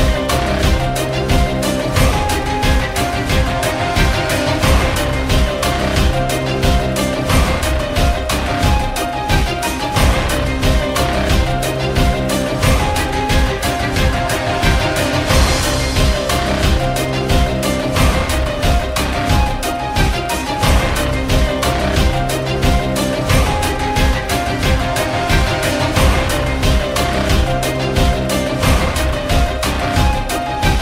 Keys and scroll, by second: 0.7 alt+w, 1.7 Return, 1.8-3.5 typing, 6.8-9.1 typing, 11.0-13.1 typing, 14.4 m, 25.9-26.9 typing, 29.2 g, 30.5-30.8 typing, 30.6 Tab, 30.7 Return.